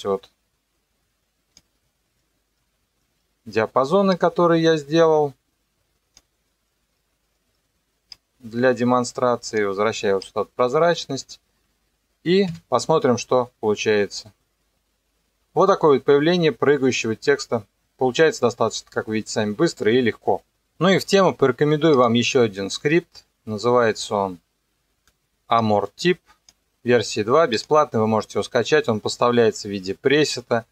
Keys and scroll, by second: 12.5 KP_0.